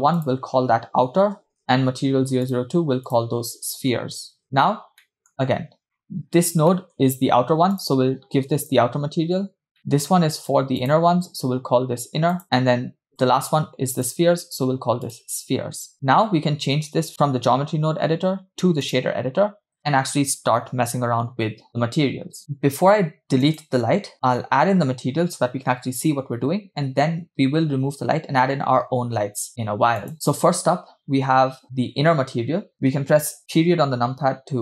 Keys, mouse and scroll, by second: 0.4-1.6 drag, 2.5-4.9 drag, 4.4 e, 5.1 middle click, 5.3-5.8 scroll up 3, 5.8 scroll down 3, 6.0 middle click, 6.8 middle click, 7.0 scroll up 2, 8.2-9.7 drag, 10.0 middle click, 10.4-12.4 drag, 12.4 middle click, 14.0-15.9 drag, 17.1-19.1 drag, 23.4 click, 30.0-32.6 drag, 32.7-33.4 scroll down 6, 33.4 KP_Decimal.